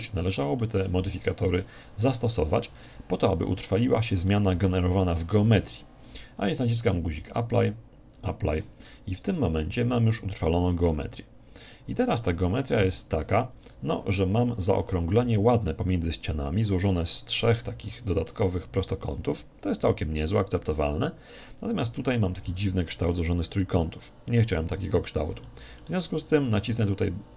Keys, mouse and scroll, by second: 3.4 middle click, 4.0-4.3 scroll up 1, 4.3-6.0 middle drag, 7.2-9.9 drag, 9.2 Tab, 9.7-11.8 middle drag, 13.5-14.6 scroll down 1, 14.6-15.4 scroll down 1, 15.4 scroll down 1, 16.8-19.7 middle drag, 21.4-24.4 middle drag, 25.4-27.1 middle drag, 26.3-27.3 right drag.